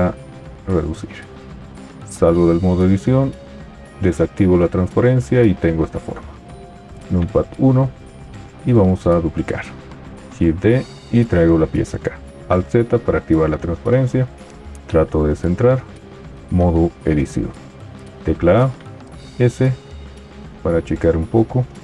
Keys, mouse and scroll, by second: 2.1 Tab, 3.9 alt+z, 7.0 KP_1, 10.4 shift+d, 12.7 alt+z, 16.6 Tab, 18.0 a, 19.3 s.